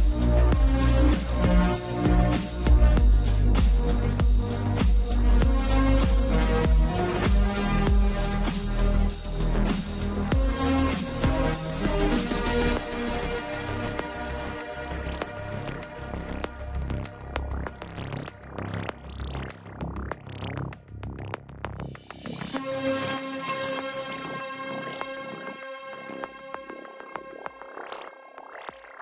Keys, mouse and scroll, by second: 1.0 scroll down 2, 4.5 click, 5.7 shift+z, 7.2 click, 8.4 click, 9.3-9.8 scroll up 5, 16.9 shift+d, 25.3 shift+click, 26.3 shift+click, 28.4 shift+d.